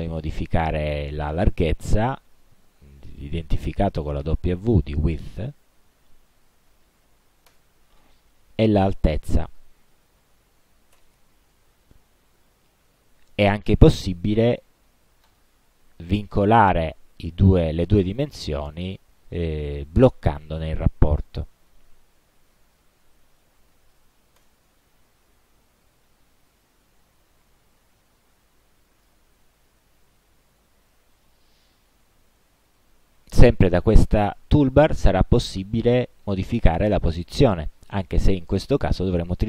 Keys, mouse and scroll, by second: 1.2 click, 6.8 1, 7.0 2, 7.6 Return, 9.4 click, 10.3 8, 11.0 Return, 15.3 click, 21.5 click, 23.6-24.5 typing, 26.7-29.3 drag, 36.3 click.